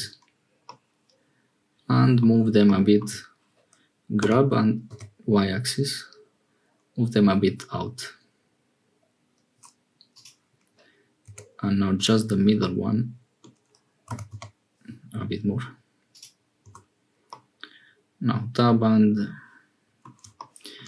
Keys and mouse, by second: 0.6-2.2 middle drag, 4.2 g, 11.2 1, 11.9-13.5 drag, 14.0 g, 16.6 Tab, 17.2-20.1 drag.